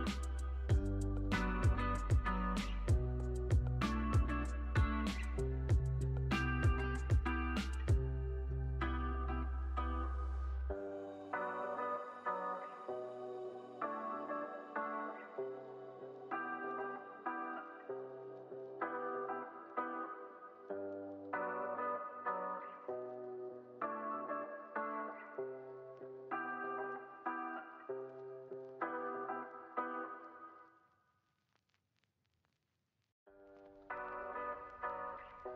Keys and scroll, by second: 7.5 super+s, 17.5 super+s, 22.0 super+s, 24.0 u, 25.5 super+s.